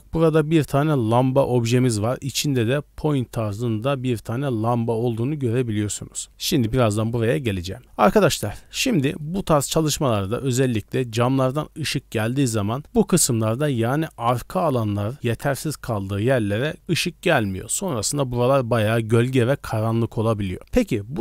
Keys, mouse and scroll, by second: 3.0 right click, 5.7-6.4 scroll down 4, 6.3 shift+middle click, 6.3 scroll up 2, 7.1 middle drag, 7.3-7.7 scroll down 3, 8.3 middle click, 9.2 shift+middle drag, 9.9 middle drag, 10.2 middle click, 10.9-13.7 typing, 11.1 click, 11.9 click, 13.7-17.3 drag, 17.3 d, 17.8 scroll down 1, 18.7-19.3 scroll down 1, 18.7 d, 19.3 d, 19.3-20.5 drag, 19.3 right click, 20.5 d, 20.6 middle click, 20.6 scroll up 1.